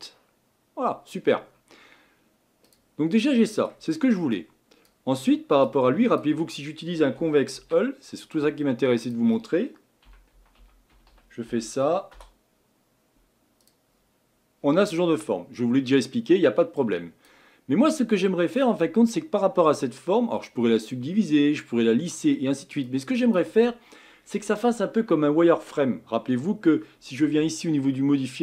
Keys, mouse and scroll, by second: 15.0-19.0 middle drag, 19.0-19.4 scroll down 2, 19.4-28.4 middle drag.